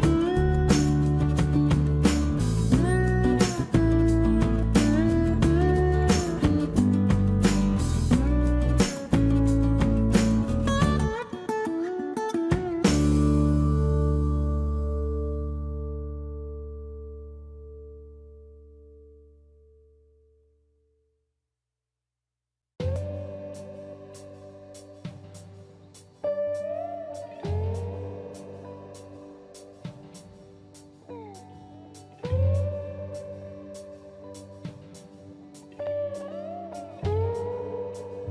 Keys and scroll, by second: 0.2 Escape, 2.0 ctrl+z, 2.5 ctrl+z, 3.5 space, 3.7 Escape, 4.4 space, 4.5 Escape, 4.8 Escape, 6.0 shift+c, 8.1 Delete, 8.4 Escape, 9.0 Escape, 9.7 Escape, 10.4 Escape, 13.2 Escape, 16.1 ctrl+c, 16.3 space, 16.6 Escape, 20.1 Delete, 20.5 ctrl+v, 21.6 shift+c, 23.0 k, 23.9 q, 25.6-28.8 typing, 27.0 Escape, 27.8 Escape, 28.8 Escape, 31.7 Escape, 32.5 ctrl+c, 32.7 Escape, 32.9 Escape, 33.0 Escape.